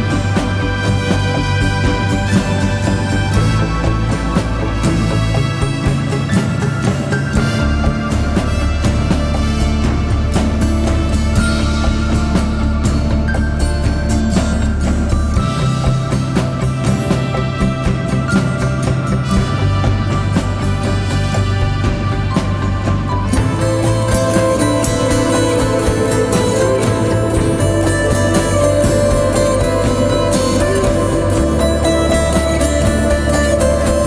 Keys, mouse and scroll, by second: 12.1 ctrl+t, 16.1 Return, 26.1-30.3 scroll up 1, 33.9 alt+right click.